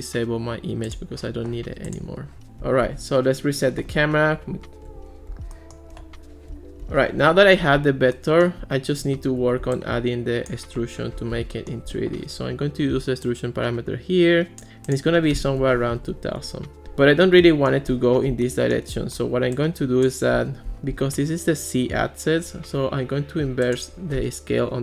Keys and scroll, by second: 2.9 alt+r, 15.4-16.4 typing, 16.4 Return, 24.7-24.8 typing.